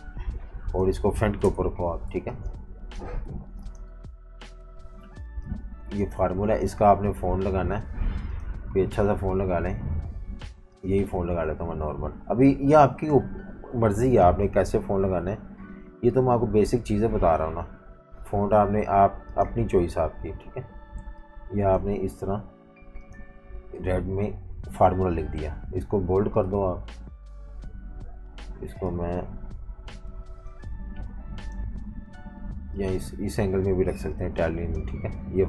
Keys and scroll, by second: 1.4 shift+super+], 2.1 z, 2.3 z, 3.3 v, 3.5 space, 23.7-24.8 typing.